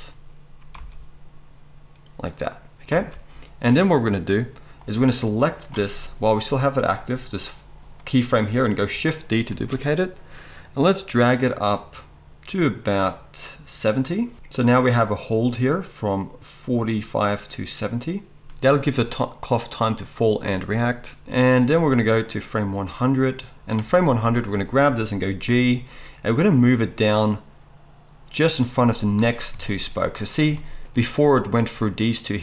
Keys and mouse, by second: 0.7 space, 3.0 space, 9.5 shift+d, 14.1 middle click, 14.6-28.5 drag, 25.4 g, 28.5-32.4 middle drag.